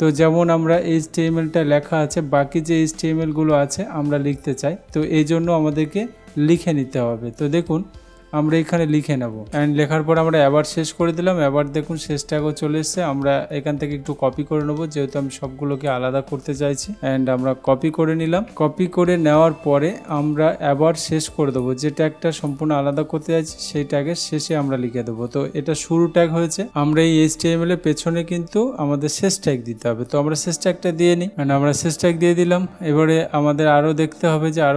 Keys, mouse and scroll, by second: 7.8 click, 9.4 shift+., 12.4 click, 14.2 click, 18.4 ctrl+c, 20.2 click, 21.6 click, 25.6 BackSpace.